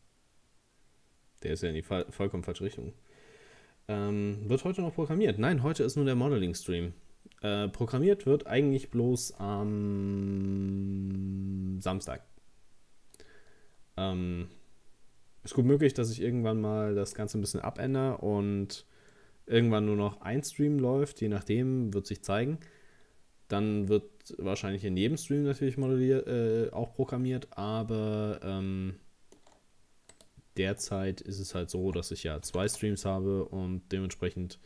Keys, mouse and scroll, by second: 25.9-29.0 middle drag, 30.1 right click, 32.5 g.